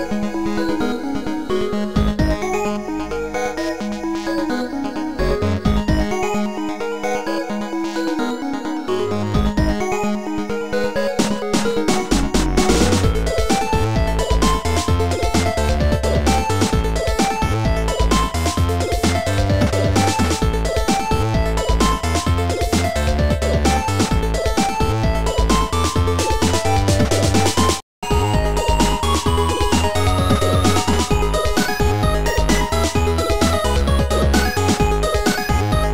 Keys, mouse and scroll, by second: 2.0 click, 4.6 click, 6.6 click, 8.2 click, 9.1 shift+click, 9.7 shift+click, 15.4 shift+click, 16.6 click, 18.3 shift+click, 19.8 shift+click, 24.6 shift+click, 24.6 click, 25.6 right click, 31.0 click.